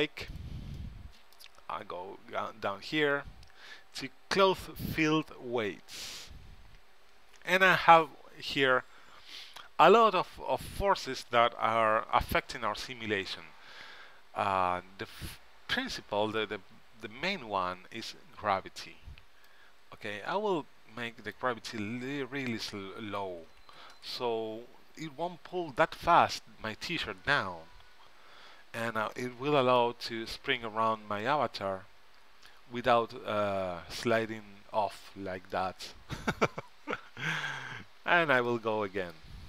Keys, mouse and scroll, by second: 0.4-2.4 drag, 0.9-2.4 right drag, 5.2-6.9 drag, 8.6 middle click, 19.6-21.4 drag, 22.6-24.3 drag, 24.4 click, 29.3-31.0 middle drag, 31.3 middle click, 35.7-37.5 middle drag, 37.5-39.2 drag, 38.8 middle click, 38.8 right click.